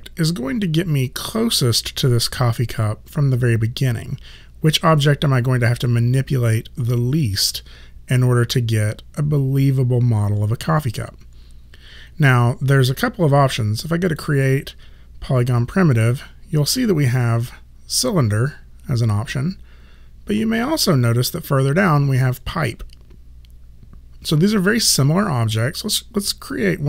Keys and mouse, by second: 14.1 click.